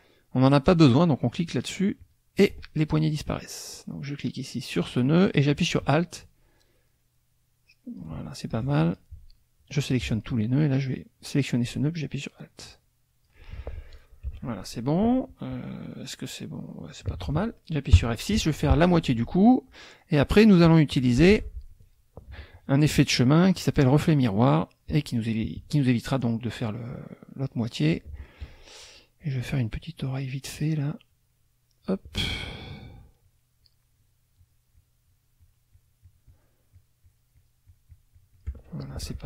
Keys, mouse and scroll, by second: 1.2 click, 2.0 click, 3.7-8.2 drag, 8.5 alt+click, 9.9 click, 11.2-13.4 drag, 13.9 click, 14.2 F1, 15.9-17.1 drag, 18.0 F6, 20.1 click, 21.3 ctrl+z, 21.7 ctrl+click, 22.5 shift+click, 22.9 shift+click, 23.5 shift+click, 24.1 shift+click, 24.6 shift+click, 27.3 click, 31.1 click, 32.5 shift+click, 32.8 shift+click, 33.2 shift+click, 33.6 shift+click, 34.0 shift+click, 34.4 shift+click, 34.8 shift+click, 36.7-38.6 shift+drag, 38.8 shift+middle click.